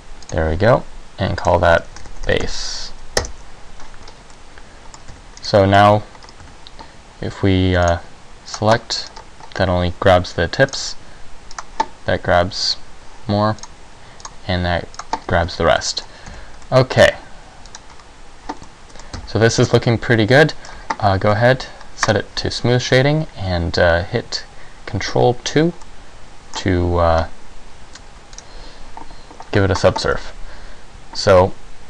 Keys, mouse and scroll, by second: 1.6 click, 4.2 scroll up 1, 4.4 middle click, 5.2 Tab, 5.5-5.9 scroll down 2, 5.7 middle click, 6.0 Tab, 6.4 scroll up 1, 6.6 a, 8.0 click, 8.8 click, 8.8-9.6 scroll up 2, 10.8 click, 11.6 click, 13.7 click, 14.3 click, 15.1 click, 15.9 middle click, 16.4 a, 16.8 middle click, 17.8 click, 18.8 middle click, 19.3 Tab, 19.7 middle click, 20.9 scroll down 1, 22.2 click, 25.3 ctrl+2, 26.0 middle click, 26.7-27.1 scroll up 3, 28.6 click, 30.3 middle click.